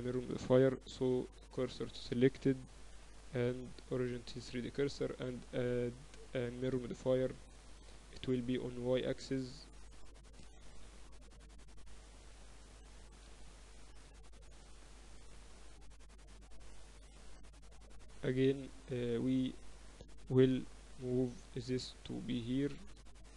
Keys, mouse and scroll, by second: 0.8-2.0 drag, 1.5 shift+s, 2.6 Tab, 3.6 ctrl+alt+shift+c, 6.3-8.3 drag, 8.8-11.4 drag, 11.1-12.3 middle drag, 11.7 KP_7, 12.5 z, 13.2 middle click, 16.5-17.6 middle drag, 17.6-19.5 drag, 19.5-21.3 middle drag, 19.7 Tab, 20.3 a, 21.3 b, 22.7-23.3 drag.